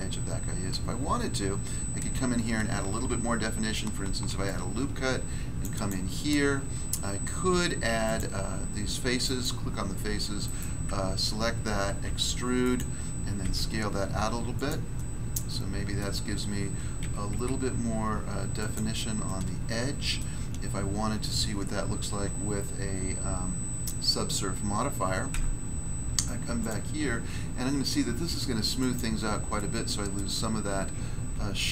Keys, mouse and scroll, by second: 0.9 scroll up 1, 4.0 ctrl+r, 4.4 click, 5.6 click, 5.7 click, 5.8 click, 9.2 right click, 9.4 right click, 10.4 alt+right click, 10.5 alt+right click, 12.0 e, 12.6 click, 12.7 click, 13.4 s, 14.5 click, 14.6 click, 14.9 middle click, 15.9 middle click, 17.0-17.3 typing, 18.5 click, 18.7 click, 19.2 middle click, 20.1 middle click, 25.3 Tab, 26.5 click, 26.6 click, 28.7 click, 28.9 click, 29.5 middle click, 30.1 middle click, 30.6-31.2 scroll up 1, 31.2 scroll down 1.